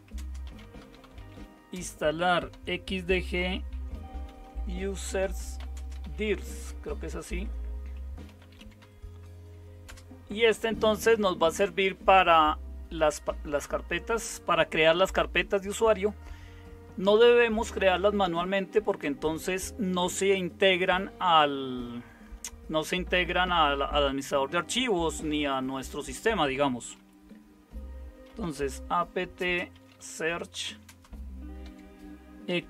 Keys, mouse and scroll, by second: 0.0-9.8 typing, 13.6 Return, 28.0-32.6 typing.